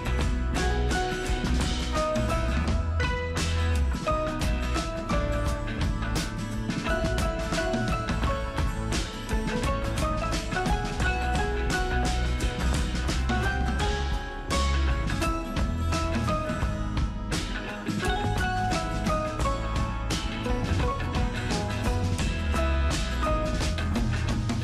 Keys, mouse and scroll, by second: 1.3 super+Return, 1.6 super+click, 2.3 ctrl+super+t, 2.9-4.5 super+drag, 4.5 super+Return, 5.1 super+click, 6.4 ctrl+super+t, 6.7-8.0 super+drag, 8.0 super+Return, 8.9 super+click, 9.6 ctrl+super+t, 10.0-11.4 super+drag, 11.4 super+Return, 12.3 super+click, 13.9 ctrl+super+t, 14.3-16.9 super+drag, 16.9 super+Return, 18.2 super+click, 18.5 ctrl+super+t, 19.1-20.9 super+drag, 20.2 Return, 20.9 super+Return, 21.3 super+click, 21.9 ctrl+super+t, 22.3-24.6 super+drag.